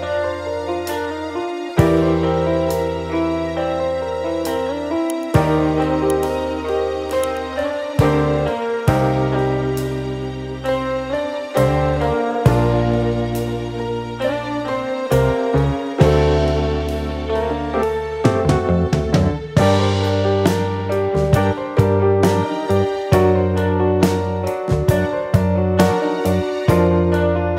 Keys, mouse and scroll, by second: 1.2 F9, 3.6 Escape, 4.0 click, 4.6 ctrl+o, 5.6-6.6 scroll down 1, 7.1-7.7 scroll down 1, 8.3 click, 9.0 click, 15.8 F4, 16.7 click, 18.4 click, 19.3 ctrl+click, 20.7 click, 21.7 click, 23.4 ctrl+click, 24.3 ctrl+r, 25.2 ctrl+click, 27.1 click.